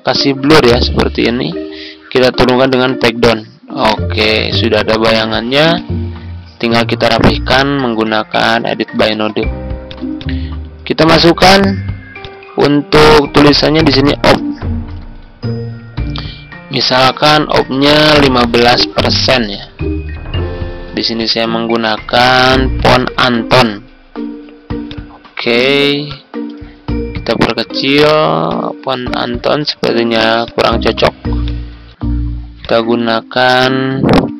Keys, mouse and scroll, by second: 2.8 ctrl+Page_Down, 5.7-10.1 drag, 14.2-15.0 typing, 15.7 ctrl+a, 16.7 Right, 17.4 Return, 18.0 typing, 19.4 shift+5, 19.9 ctrl+a, 21.1 click, 22.5-23.6 typing, 24.8 click, 27.3 ctrl+click, 28.4-29.9 drag, 31.6 ctrl+a, 32.5 click, 33.5-34.3 typing.